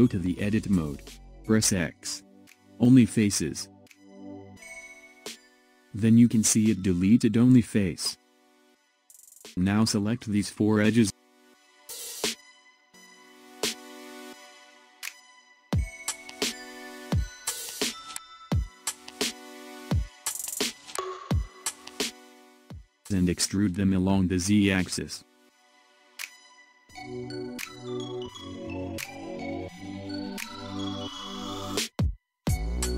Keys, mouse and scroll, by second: 0.6 Tab, 2.2 x, 5.5-6.1 scroll up 2, 6.1-8.3 shift+middle drag, 8.3 click, 9.8 click, 11.6 shift+click, 12.4-14.4 middle drag, 14.4 shift+click, 15.1-16.8 middle drag, 16.8 shift+click, 18.4 KP_1, 20.9-23.2 shift+middle drag, 23.2 e.